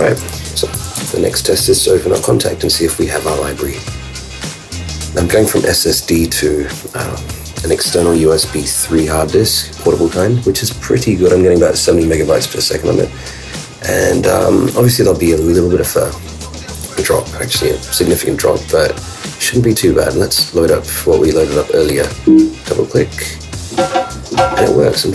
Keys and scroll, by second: 1.0 super+space.